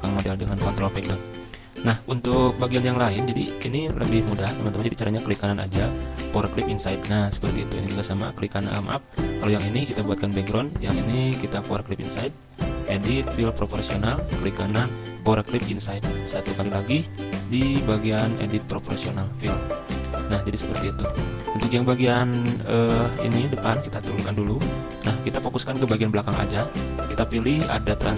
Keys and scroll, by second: 0.1 ctrl+Page_Down, 4.2 ctrl+z, 24.1 ctrl+Page_Down, 24.4 ctrl+Page_Down, 25.2 ctrl+Page_Up, 25.4 ctrl+Page_Up.